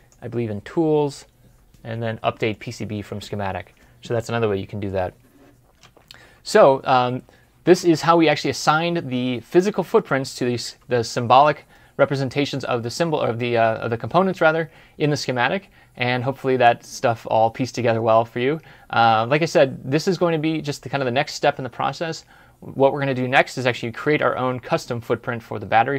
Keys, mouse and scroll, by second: 6.9 ctrl+F11.